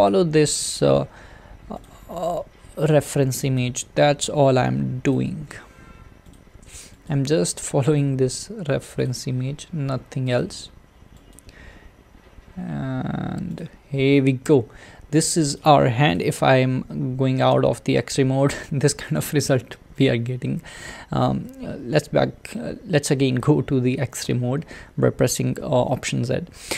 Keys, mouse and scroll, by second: 0.1 click, 0.4 e, 2.1 e, 3.6 click, 3.7 e, 5.3 e, 7.1 click, 7.2 e, 9.3 e, 11.3 click, 11.5 e, 13.7 e, 16.2 click, 17.5 alt+z, 24.3 alt+z.